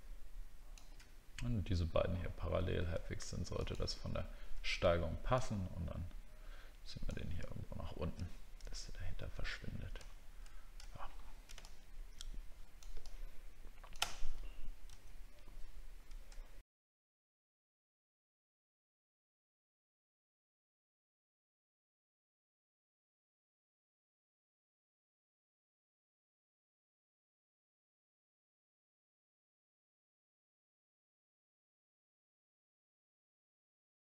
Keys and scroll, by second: 11.2 alt+scroll down 1, 16.3 alt+scroll down 1, 18.5 alt+scroll up 1, 20.8 alt+scroll down 1, 23.5 alt+scroll up 1, 28.8 alt+scroll down 1, 29.5 alt+scroll down 1.